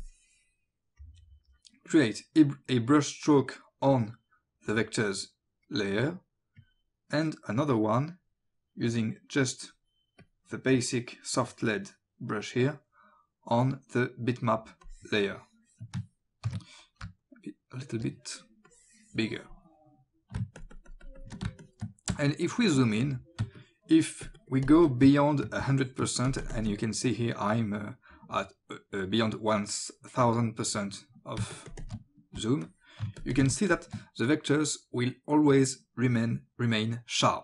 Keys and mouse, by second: 0.0 click, 6.6 click, 8.0 click, 10.2 click, 14.8 click, 16.5 ctrl+z, 17.1 o, 17.2 click, 18.7 click, 20.4 space, 20.6 ctrl+click, 21.6 click, 22.3 click, 23.6 click, 24.0 ctrl+space, 24.2 ctrl+click, 24.7 ctrl+click, 25.1 ctrl+space, 25.8 click, 26.0 ctrl+space, 26.3 ctrl+click, 26.6 space, 31.4 ctrl+space, 31.5 ctrl+click, 31.7 ctrl+click, 32.6 click, 33.0 alt+space, 33.7 click.